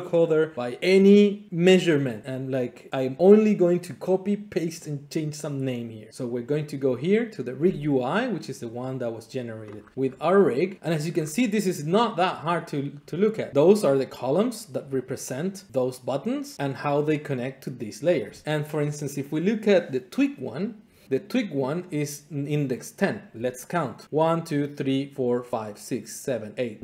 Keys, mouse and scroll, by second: 6.5-7.5 drag, 8.6 click, 9.7-10.7 scroll, 10.7 click, 11.1-12.6 scroll, 13.3 scroll, 14.7 click, 16.6 click, 17.6 click.